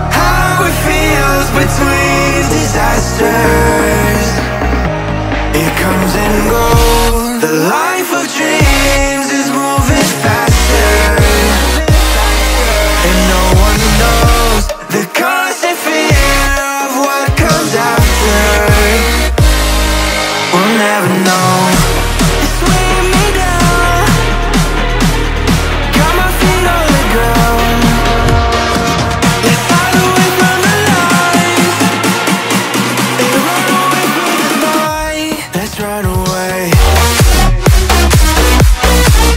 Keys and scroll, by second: 11.0 ctrl+z, 13.6 v, 34.0 space.